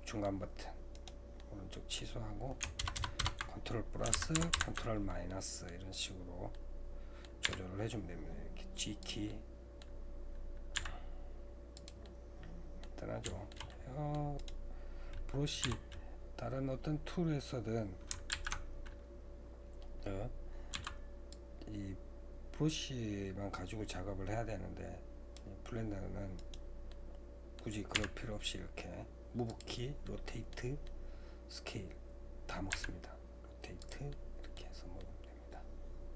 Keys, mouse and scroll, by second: 1.4-6.0 middle drag, 2.8 ctrl+KP_Add, 3.0 ctrl+KP_Add, 4.1 ctrl+KP_Subtract, 4.4 ctrl+KP_Subtract, 6.0-6.5 scroll up 1, 6.5 middle click, 7.5 g, 9.3-10.8 middle drag, 10.8 g, 12.1-14.4 middle drag, 14.4-18.3 right drag, 18.3 alt+a, 19.5-20.7 scroll up 4, 20.7 c, 26.9-28.0 middle drag, 28.0 g, 30.0 middle click, 30.8 scroll down 1, 31.0-32.7 middle drag, 32.7 r, 34.1 middle click, 34.8 scroll down 1, 35.0-36.1 middle drag.